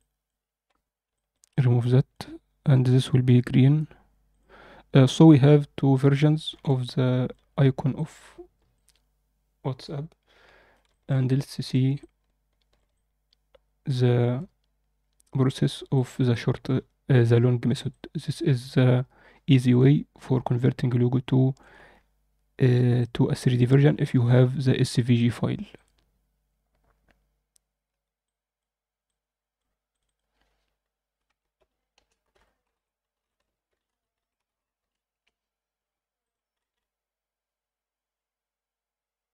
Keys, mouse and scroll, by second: 1.1 alt+middle click, 1.4 click, 1.8 alt+middle drag, 2.8 drag, 3.4-5.7 drag, 6.2 scroll down 2, 6.5 alt+a, 6.7-7.2 middle drag, 8.0 click, 8.7-10.7 alt+middle drag, 10.8 alt+shift+middle click, 11.2-11.7 ctrl+alt+middle drag, 11.9-12.7 ctrl+alt+middle drag, 12.9-15.4 alt+middle drag, 15.9 shift+middle click, 16.2-17.6 alt+middle drag, 17.8-21.5 alt+middle drag, 21.8-22.7 scroll up 2, 22.9-23.5 ctrl+alt+middle drag, 23.9 ctrl+middle drag, 25.1 click, 25.7 click, 28.2-28.5 drag, 29.0 click, 29.8-35.1 drag, 36.1 click, 36.6 ctrl+s.